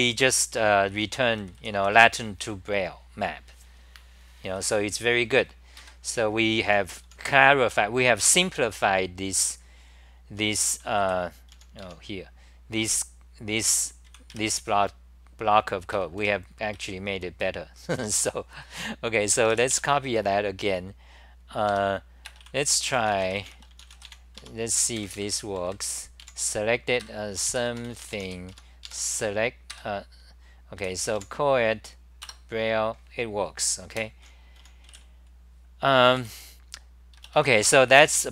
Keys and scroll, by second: 0.0-2.3 typing, 4.9-7.5 typing, 5.8 ctrl+g, 9.9-12.3 typing, 14.0 c, 14.3 6, 16.2 ctrl+g, 16.8 i, 18.0 Home, 21.8 4, 22.8 u, 24.3 Home, 25.0 super+=, 26.2 super+=, 26.2-29.0 typing, 27.0 ctrl+g, 28.5 Home, 29.7 ctrl+g, 30.8 g, 31.2 a, 32.2 Return, 33.9 super+w, 34.9 w, 36.2 3, 37.8-38.3 typing.